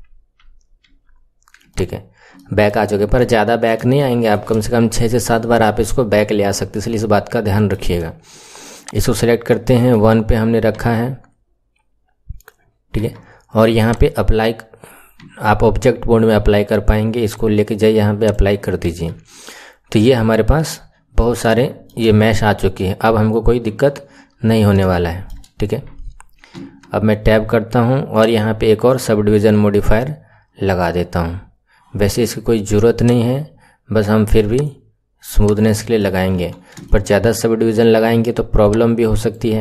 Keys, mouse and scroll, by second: 0.4 ctrl+z, 0.9 ctrl+z, 1.6 click, 2.3-2.9 middle drag, 2.9 KP_1, 3.3-3.9 scroll up 4, 3.9-4.8 shift+middle drag, 4.8-5.2 scroll down 1, 5.3-8.6 shift+middle drag, 8.6 click, 9.4-10.8 middle drag, 10.8 Tab, 12.9 Tab, 13.8-15.2 drag, 15.2 Tab, 17.2-18.8 drag, 18.8 Tab, 21.4 shift+middle click, 22.0-23.6 scroll up 6, 23.6 KP_1, 23.9-24.8 scroll down 10, 24.8-26.4 shift+middle drag, 26.4 Tab, 28.0-31.2 drag, 32.9-35.4 drag, 35.6-36.3 middle drag, 36.3 KP_1, 36.8-37.3 shift+middle drag, 37.3-37.6 scroll up 3, 38.6-39.2 drag.